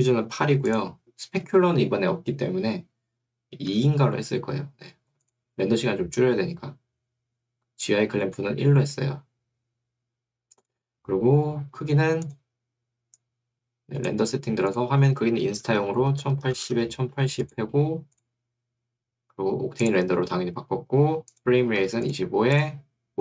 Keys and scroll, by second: 0.5 8, 3.7 2, 15.1-17.2 typing, 16.1 Tab, 21.7 2.